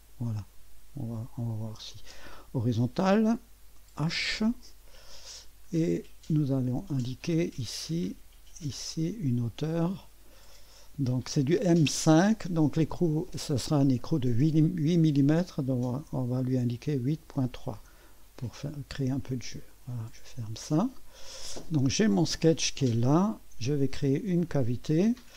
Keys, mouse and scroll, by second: 0.6 middle click, 1.9 click, 3.9 h, 6.9 click, 7.7 click, 8.7 click, 10.5 click, 10.9 click, 15.9 8, 17.1 ., 17.4 3, 17.8 Return, 19.7 click, 21.4 click, 22.1 click, 22.1 typing, 22.8 click, 24.4 click.